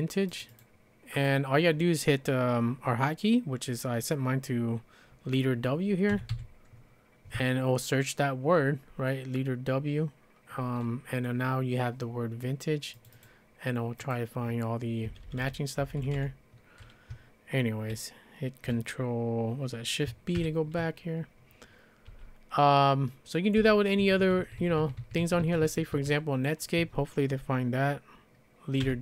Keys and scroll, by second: 5.9-6.8 typing, 15.1 Page_Down, 15.2 Page_Down, 15.4 Page_Down, 15.8 Page_Up, 16.0 Page_Up, 16.1 Page_Up, 20.4 shift+b, 22.1 j, 23.3-25.9 typing, 28.6-29.0 typing.